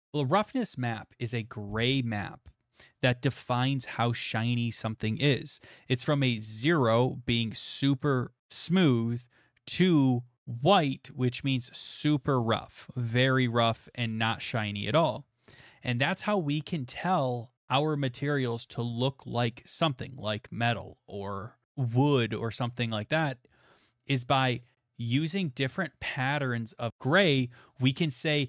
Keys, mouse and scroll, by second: 0.8-1.6 scroll, 25.5 middle click, 25.5 middle click, 25.6 middle click, 25.6 middle click, 26.5 middle click, 26.9 middle click.